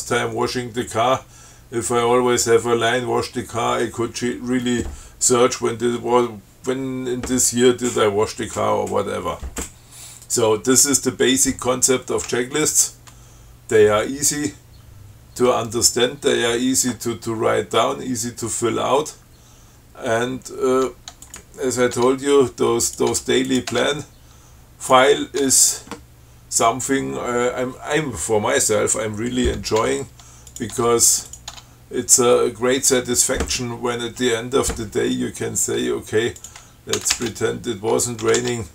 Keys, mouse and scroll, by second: 12.9 click, 21.5 click, 22.2 Tab, 23.1 click, 23.3 Tab, 23.7 click, 25.2 click, 25.7 Tab, 30.0 Tab, 30.8 click, 31.0 Tab, 31.5 click, 31.8 Tab, 36.7 ctrl+click, 37.2 ctrl+c, 38.5 ctrl+c.